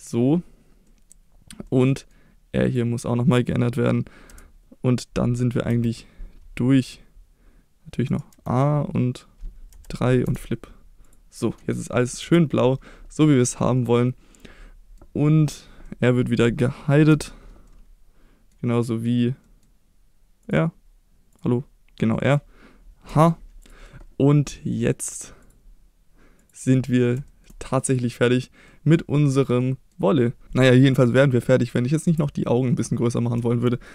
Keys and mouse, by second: 0.9 middle click, 1.7-2.1 middle drag, 2.7 click, 3.3 middle click, 4.3 Tab, 5.7 F3, 8.3 a, 9.7 F3, 11.0 click, 12.2 Tab, 13.9-15.0 middle drag, 15.9 middle drag, 17.1 h, 17.7-18.5 middle drag, 18.9 middle click, 19.4 middle click, 20.4 click, 21.3 click, 22.0 middle click, 23.1 h, 23.6 click, 25.4-26.7 drag, 26.9 middle click, 27.3 shift+middle drag, 27.8-28.1 middle drag, 28.4 click, 28.7 middle drag, 29.6-29.9 middle drag, 31.2 middle click, 32.0 Tab, 33.4 shift+middle click.